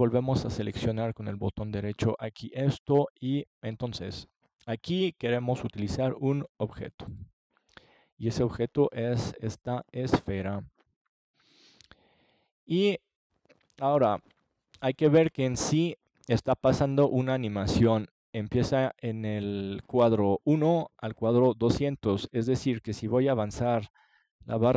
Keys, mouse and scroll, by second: 1.8 right click, 6.2 right click, 17.0-18.9 drag.